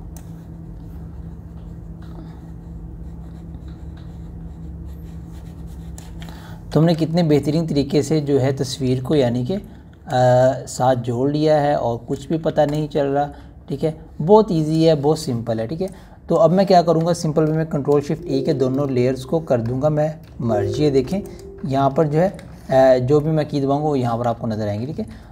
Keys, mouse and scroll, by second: 0.3 [, 0.5 [, 0.7 [, 1.0-6.9 drag, 7.9 ctrl+alt+scroll down 1, 10.0 ], 10.2 ], 10.4 ], 10.8 ], 10.9-13.1 drag, 13.2 ], 13.3 ], 13.6-15.8 drag, 18.9 ctrl+shift+e, 22.1 click, 23.1 ctrl+shift+e.